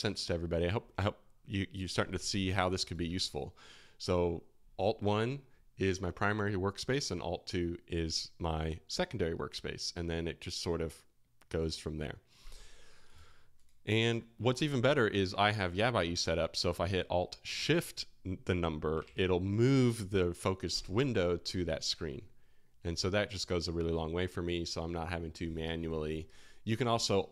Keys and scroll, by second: 3.1 alt+1, 15.1 alt+2, 19.0 alt+shift+1, 26.1 space.